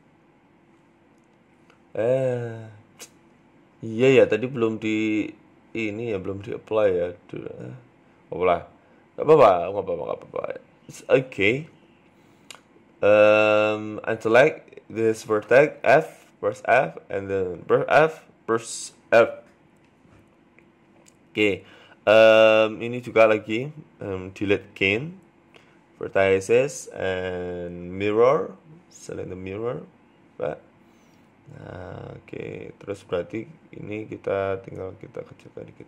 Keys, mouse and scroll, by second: 0.6 Delete, 1.2 middle click, 1.5 scroll up 1, 2.0 alt+shift+right click, 2.4 ctrl+z, 2.9 alt+shift+right click, 3.8 Delete, 4.6 alt+shift+right click, 5.2 Delete, 5.8 middle click, 6.6 alt+shift+right click, 7.4 ctrl+z, 7.6 alt+shift+right click, 8.1 Delete, 8.7 middle click, 9.6 alt+right click, 10.3 a, 10.6 a, 10.7 a, 11.1 alt+shift+right click, 12.9 shift+right click, 13.2 ctrl+z, 13.4 ctrl+z, 14.0 shift+right click, 15.1 f, 15.3 middle click, 15.8 right click, 16.1 shift+right click, 17.4 f, 18.0 KP_1, 18.7-19.4 scroll down 3, 20.7 click, 21.2-21.8 scroll up 8, 21.9 middle click, 22.4 scroll down 2, 23.2 shift+right click, 23.2-23.6 scroll down 2, 23.6 ctrl+z, 23.8 shift+right click, 24.2 shift+middle click, 24.7 shift+right click, 25.2 Delete, 25.8-26.2 scroll down 3, 26.0 middle click, 26.2 middle click, 27.3 click, 29.2 scroll down 2, 29.5 Tab, 29.5 middle click, 30.1-30.5 scroll up 2, 30.5 KP_3, 30.8 Tab, 30.9 scroll up 4, 31.1 shift+middle click, 31.8 shift+middle click, 33.1 right click, 33.4 alt+shift+right click, 34.6 s, 35.7 right click.